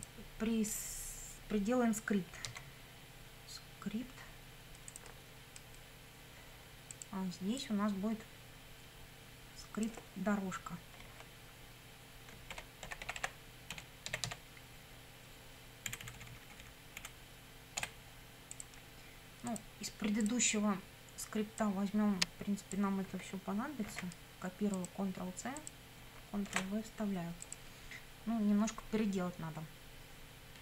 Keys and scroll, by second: 2.5 s, 12.3-14.8 typing, 15.9 Left, 17.8 BackSpace, 23.9 ctrl+c, 26.5 ctrl+v.